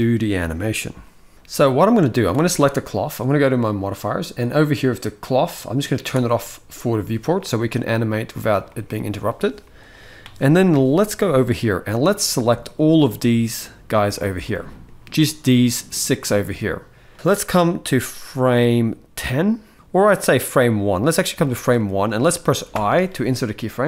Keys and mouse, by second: 2.0 click, 5.9 click, 7.9 middle click, 8.4-9.2 shift+middle drag, 11.3-12.5 middle drag, 12.8-13.9 drag, 14.2-14.6 middle drag, 17.1-19.6 drag, 20.1-21.1 drag, 21.5 shift+middle click, 22.5 i.